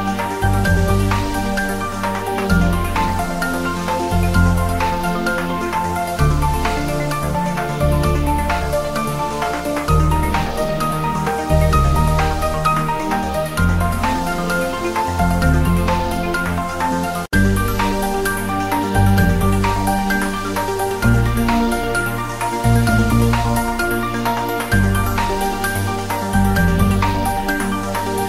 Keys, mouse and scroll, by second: 0.4 click, 1.2 scroll up 1, 1.7 click, 3.2-4.2 scroll down 2, 3.4 click, 4.6 click, 5.1-5.4 scroll up 1, 6.9 shift+a, 7.6 click, 8.4-8.7 scroll down 1, 8.7 r, 9.2 click, 9.8 click, 10.4 scroll up 1, 10.7-13.0 typing, 11.1 click, 12.2 click, 12.7-13.0 scroll down 1, 15.0 click, 15.3 s, 17.0 click, 18.1 g, 18.8 click, 19.0 s, 19.7 x, 21.0 click, 22.1 shift+z, 22.2 scroll down 1, 22.5 Tab, 23.0 3, 23.5 click, 25.7 ctrl+b, 27.8 click, 28.0 Tab.